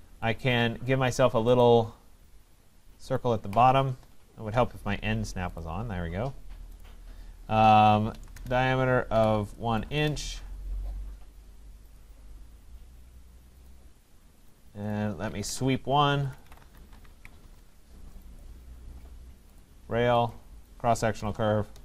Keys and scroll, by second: 8.3 Return, 15.3 Escape, 17.4 Return.